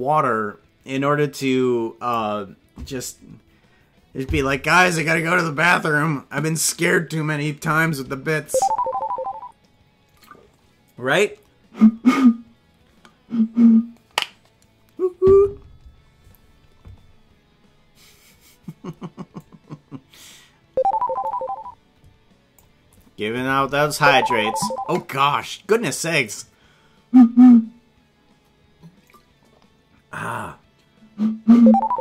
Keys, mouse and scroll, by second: 1.4 click, 19.4-22.6 drag.